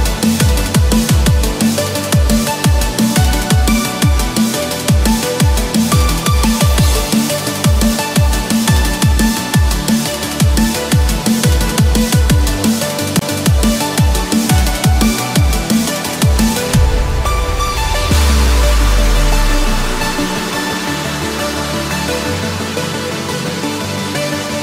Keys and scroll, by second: 10.3 ctrl+-, 11.2 ctrl+=, 17.5 ctrl+-.